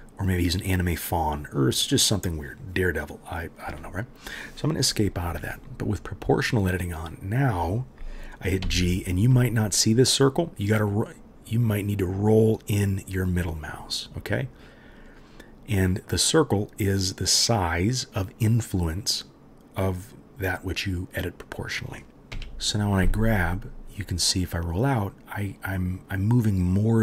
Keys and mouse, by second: 6.7 middle click, 6.8-11.3 right drag, 8.6 g, 11.6 right click, 11.9-27.0 right drag, 22.1 ctrl+z, 22.3 g.